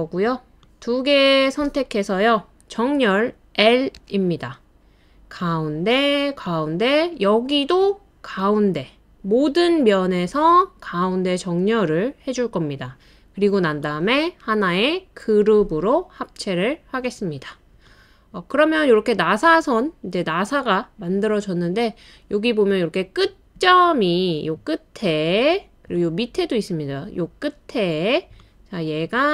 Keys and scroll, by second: 4.0 l, 8.2 typing, 18.0-18.7 typing, 21.7 typing, 22.9 typing, 24.4-24.7 typing, 28.9 typing.